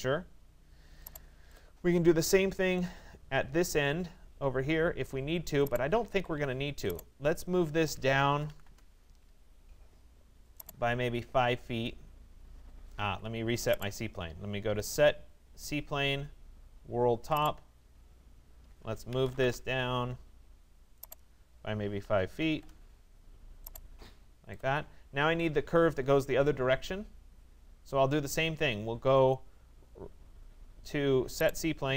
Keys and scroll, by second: 5.7 Escape, 8.7 Return, 12.7 Escape, 19.0 Return, 22.0 5, 22.5 Return.